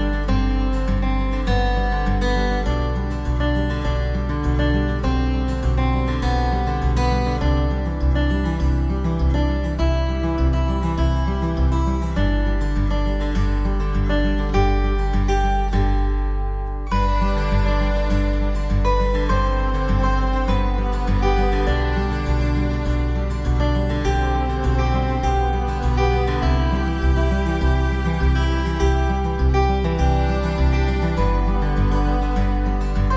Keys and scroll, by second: 0.4 ctrl+j, 8.8 ctrl+j, 9.1 v, 9.6 ctrl+t, 10.8 ctrl+t, 15.1 v, 21.2 ctrl+d, 21.6 v, 24.5 ctrl+o, 25.9 ctrl+a, 26.1 ctrl+c, 26.6 ctrl+v, 27.7 ctrl+v, 27.8 ctrl+t.